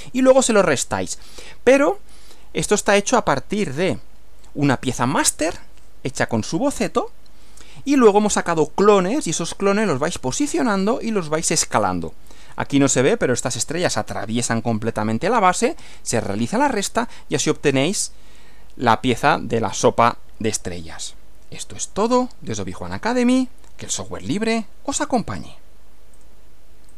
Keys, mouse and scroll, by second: 3.8 Right, 26.2 click, 26.9 click.